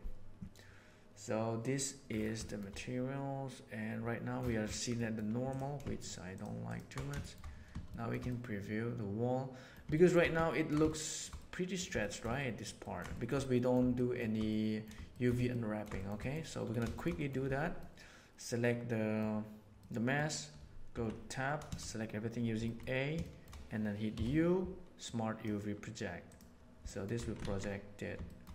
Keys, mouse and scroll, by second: 2.4 shift+middle click, 4.9 middle click, 5.9 ctrl+shift+drag, 7.1 shift+middle click, 7.8 shift+middle drag, 8.2-9.6 middle drag, 9.9 shift+middle click, 10.4 ctrl+middle drag, 10.9 shift+middle drag, 11.3-11.7 middle drag, 11.9 shift+middle drag, 12.3 ctrl+middle drag, 12.7 ctrl+middle drag, 13.1 shift+middle drag, 13.3 middle drag, 13.9 shift+middle drag, 14.4 middle drag, 15.0 shift+middle click, 15.4-15.8 ctrl+middle drag, 15.9 shift+middle click, 16.1 middle click, 16.9 shift+middle click, 17.1 middle click, 17.8-19.1 middle drag, 19.7-20.1 middle drag, 20.9 Tab, 22.5 a, 22.6 middle click, 23.1 shift+middle click, 24.1 u, 26.8 middle click, 27.1 Tab, 27.4 alt+a, 28.2 shift+middle drag.